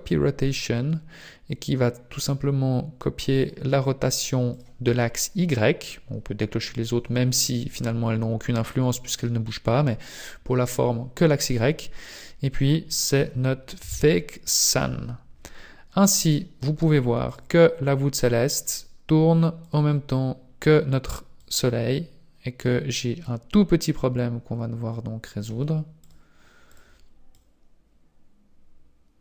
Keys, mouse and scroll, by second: 3.3 click, 4.3 click, 11.5 click, 17.3 click, 18.5 click, 19.5 click, 21.3 click, 26.0 click, 26.5 click, 27.3 click.